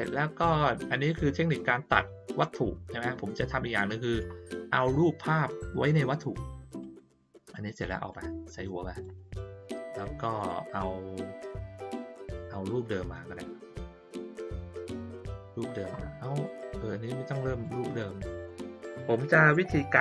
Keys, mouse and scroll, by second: 0.5 click, 3.7 middle click, 6.8-7.5 drag, 8.1-9.0 drag, 9.6 click, 10.3 click, 12.6-15.6 drag, 16.4-17.6 drag, 17.9-18.4 middle drag, 19.5 middle click.